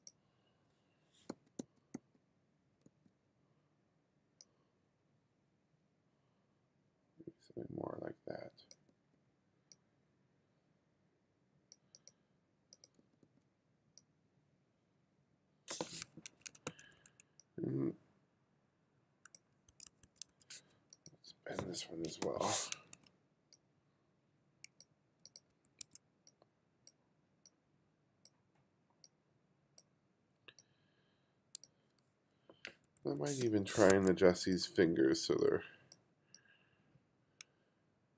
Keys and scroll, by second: 1.4 b, 3.3 b, 9.0 b, 9.5 b, 13.0 b, 16.4 3, 16.7 2, 19.7 1, 22.2 m, 22.8 w, 25.6 2, 32.9 2, 33.5 space, 34.0 2.